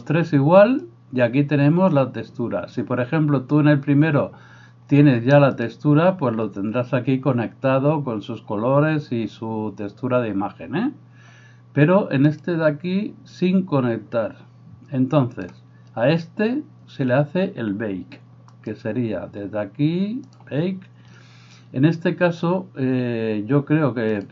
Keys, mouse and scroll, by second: 0.1-5.8 middle drag, 0.1-5.8 right drag, 0.9-5.8 drag, 8.8-12.4 middle drag, 8.8-24.3 right drag, 12.4 click, 16.3-24.3 middle drag, 18.6 click, 20.4-24.3 drag.